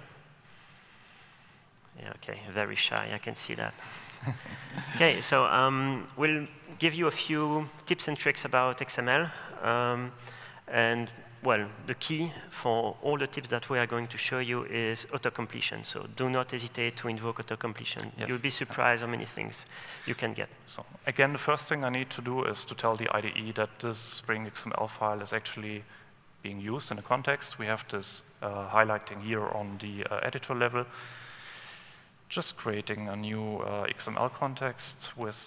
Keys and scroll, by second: 4.0 super+1.